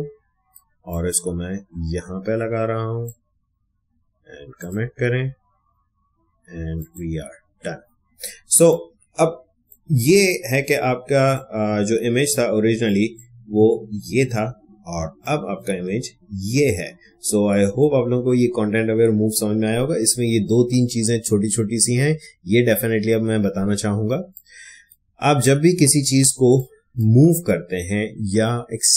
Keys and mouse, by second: 8.4 space, 8.7 click, 8.9 space, 10.2-12.8 ctrl+drag, 15.2 click, 16.4 space, 16.6 click, 17.1 space, 23.9 space, 24.3 click, 24.4 space, 25.4-28.9 ctrl+drag.